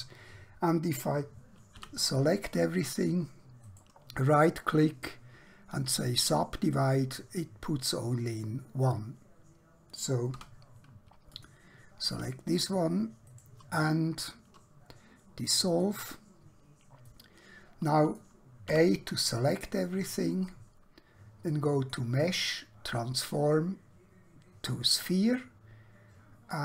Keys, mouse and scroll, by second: 1.7 a, 3.7 right click, 6.2 click, 8.0 scroll up 1, 10.3 2, 11.3 alt+click, 13.3 right click, 15.7 click, 17.0 middle click, 18.7 a, 19.4-21.5 scroll down 1, 21.8 click, 24.9 click.